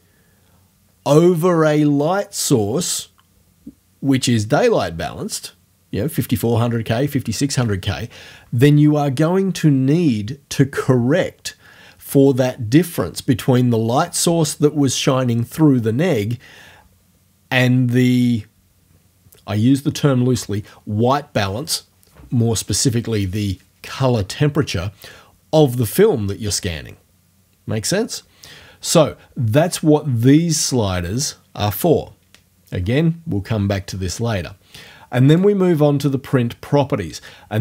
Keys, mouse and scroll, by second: 35.4 click.